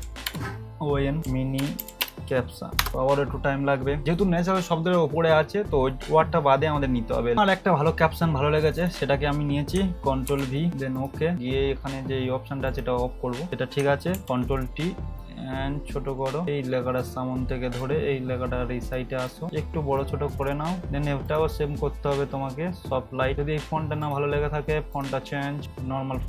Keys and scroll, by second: 0.0-2.0 typing, 2.8 Return, 10.3 ctrl+v, 14.1 ctrl+t.